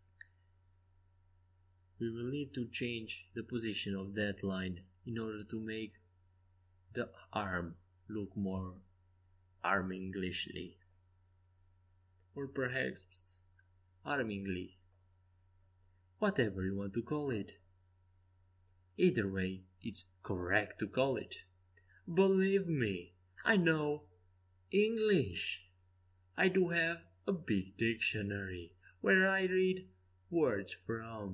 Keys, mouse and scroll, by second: 1.7 c, 2.6 a, 3.3 c, 5.2 g, 7.5 a, 9.2 KP_5, 9.8 KP_5, 12.9 c, 15.1 g, 18.9 a, 19.7-21.7 middle drag, 21.7-22.0 scroll up 1, 22.0-23.6 drag, 23.7-25.4 right drag, 24.7 g, 26.4 a, 27.5 c, 29.2 a, 30.3 c.